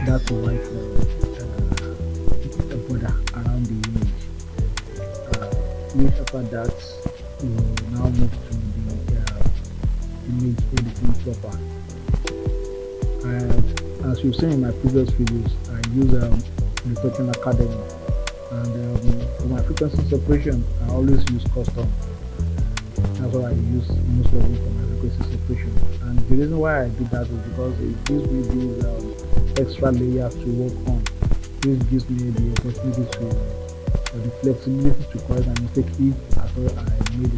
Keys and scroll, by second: 1.2 Return, 7.5 ctrl+d, 25.8 3, 26.7 Return, 32.5 3, 33.6 Return.